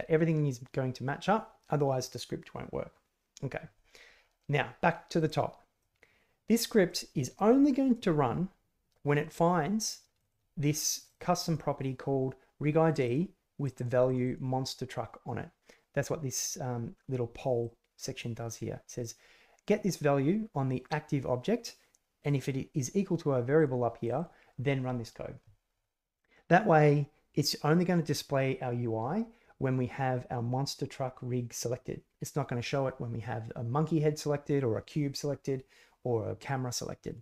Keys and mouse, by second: 4.4 middle click, 4.5 click, 4.8 middle click, 5.8 middle click, 6.2 click, 6.9 click, 10.1 click, 10.9 click, 11.0 click, 11.4 click, 12.9 click, 13.6 click, 14.0 click, 17.6 click, 18.8 click, 22.2 click, 23.5 click, 24.0 click.